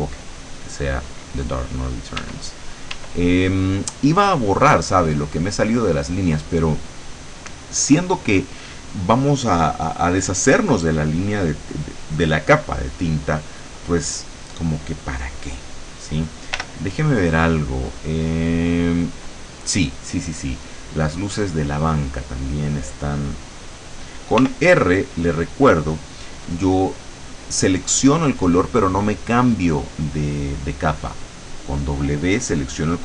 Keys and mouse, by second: 2.3 e, 3.8 middle click, 16.7 l, 17.9 click, 19.1 click, 21.5 click, 24.5 r, 31.3 click.